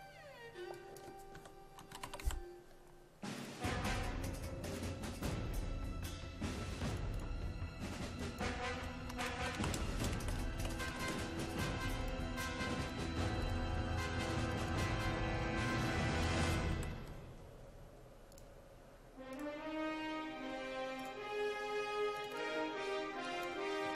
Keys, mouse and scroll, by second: 1.1-2.7 typing, 8.5-11.5 typing, 12.0-17.2 drag, 16.1-17.5 typing, 18.3 click, 19.8 click, 23.7-23.9 typing.